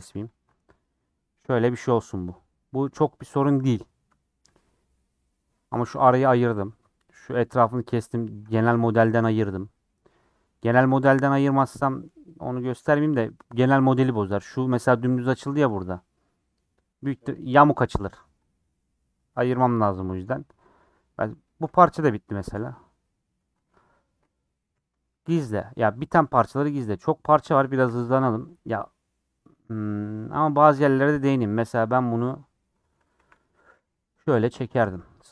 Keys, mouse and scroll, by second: 4.5 click, 5.0-6.5 middle drag, 6.5 scroll down 2, 10.6 scroll up 7, 10.9 2, 12.0 scroll down 1, 12.4 middle click, 12.6 scroll up 1, 12.9-16.8 middle drag, 16.8 click, 18.5 click, 19.7-20.1 scroll down 7, 20.2-22.4 middle drag, 22.4 Tab, 23.1 middle click, 23.8 Tab, 24.1 Tab, 24.7 h, 25.3 middle click, 25.8-26.7 scroll down 9, 26.9 click, 27.2 scroll up 3, 27.9 /, 28.3 Tab, 28.6-29.8 middle drag, 29.8 scroll up 3, 30.5-31.9 shift+middle drag, 31.9 click, 32.6 middle click, 33.2 1, 33.3 click, 33.8 g, 34.7 click, 34.8 g.